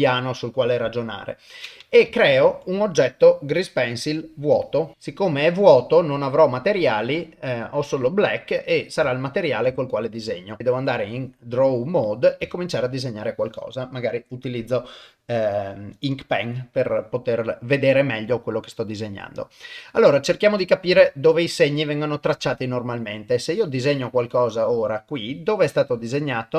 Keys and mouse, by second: 2.3 shift+a, 8.5 middle click, 9.1 ctrl+middle click, 9.8 shift+middle click, 10.6 ctrl+Tab, 12.5 shift+middle click, 13.7-16.2 drag, 21.1 shift+middle click, 23.5-24.6 drag, 26.0-26.5 middle drag.